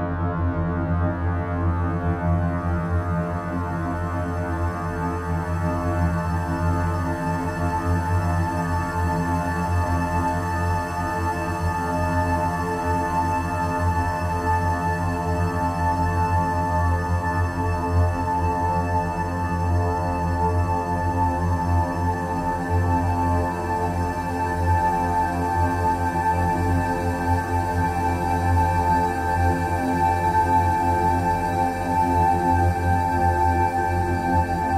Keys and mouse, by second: 0.4 BackSpace, 6.5-9.0 drag, 9.7-10.9 drag, 11.9 click, 15.9 click, 18.0 s, 23.4 click, 25.7 click, 28.3-29.4 drag, 30.3 s.